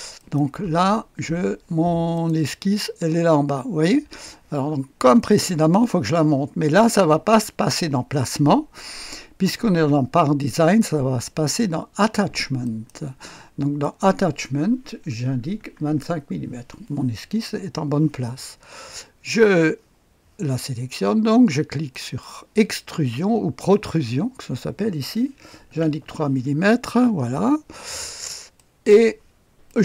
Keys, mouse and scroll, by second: 0.1 middle click, 0.4 click, 0.6 space, 2.1 middle click, 2.3 click, 5.2 click, 10.4 middle click, 10.8 click, 12.6 middle click, 12.9 click, 13.8 click, 15.2 KP_2, 15.5 KP_5, 16.0 Return, 21.9 click, 25.6 KP_3, 28.5-29.6 drag, 29.6 middle click.